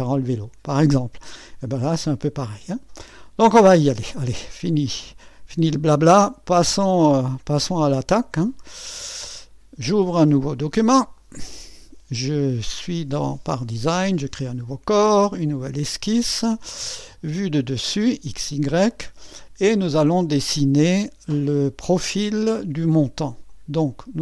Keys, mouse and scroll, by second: 0.0-10.5 drag, 11.1 click, 14.4-22.0 drag, 23.5 click.